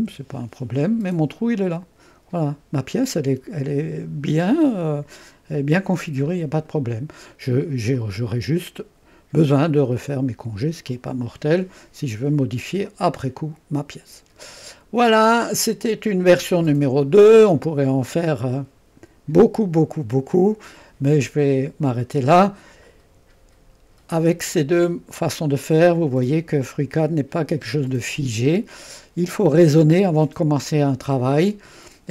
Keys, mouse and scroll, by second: 0.0 Delete, 1.5-6.8 drag, 8.0 click, 10.9 click, 12.8-15.7 drag, 15.7-16.6 scroll up 1, 16.6-18.2 right drag, 26.9-30.1 drag.